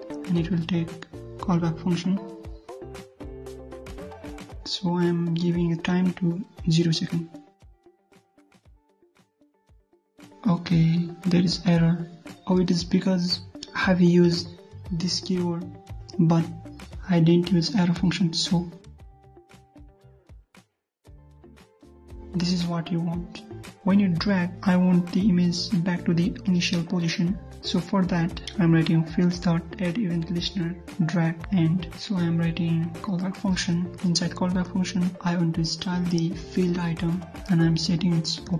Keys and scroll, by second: 5.9 ctrl+shift+Up, 7.8 ctrl+s, 8.1 alt+Tab, 8.4 ctrl+F5, 16.9 alt+Tab, 20.8 ctrl+s, 21.1 ctrl+F5, 23.5 alt+Tab, 34.5 ctrl+v.